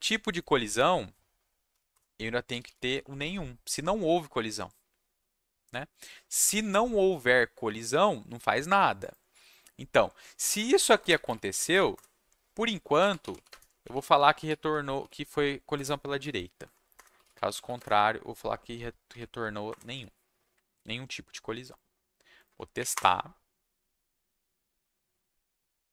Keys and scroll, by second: 1.7-3.6 typing, 1.9 Return, 11.0-19.9 typing, 11.9 Return, 16.6 Down, 19.7 Return, 20.6 ctrl+shift+a, 22.7 Up, 22.9 Return.